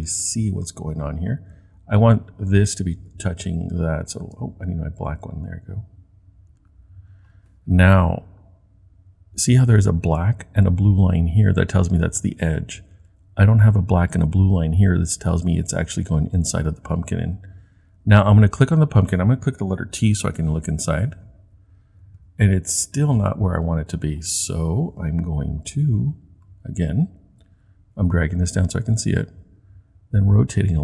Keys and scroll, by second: 20.3 t.